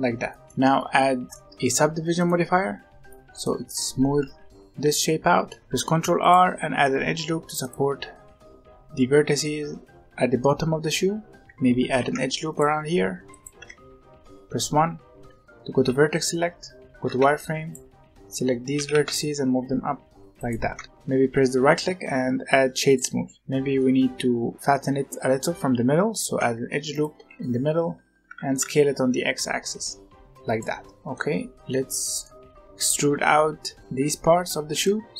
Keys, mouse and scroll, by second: 0.4 middle click, 0.5 Tab, 0.7-2.1 middle drag, 2.1-4.0 drag, 4.0 z, 4.4-5.6 middle drag, 5.6 Tab, 5.7 ctrl+r, 11.8 ctrl+r, 13.5 1, 15.7 z, 16.8 alt+a, 17.1 b, 18.7 g, 20.7 Tab, 23.4-24.9 middle drag, 26.1 ctrl+r, 28.2 s, 30.6 middle click, 30.9 scroll down 1, 31.1-33.7 middle drag, 34.7 middle click.